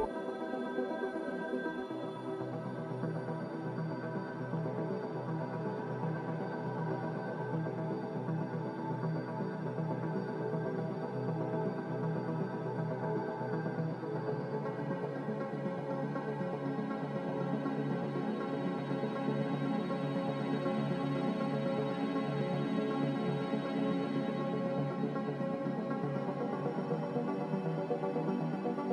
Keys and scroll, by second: 0.4 Return, 6.6 3, 6.7 Return, 8.3 3, 8.6 Return, 10.3 z, 10.9 Return, 11.7 Delete, 12.4 Delete, 13.5 Delete, 14.7 ctrl+z, 17.0 Escape, 19.4 a, 22.2 s, 25.3 a, 26.3 z, 28.0 2, 28.2 Return.